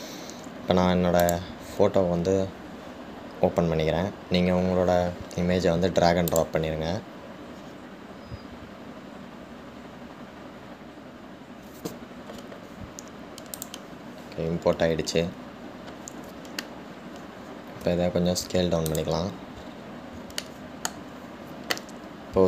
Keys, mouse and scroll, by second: 16.6-18.1 scroll up 1, 18.1-19.0 scroll down 1, 19.0 s, 20.8 scroll up 1, 21.6-22.4 shift+middle drag.